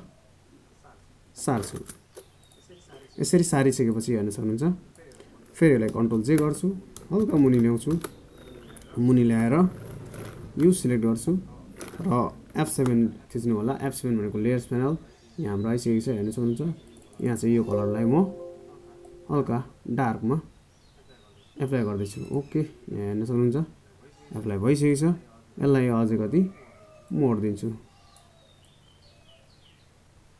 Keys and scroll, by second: 5.4 ctrl+j.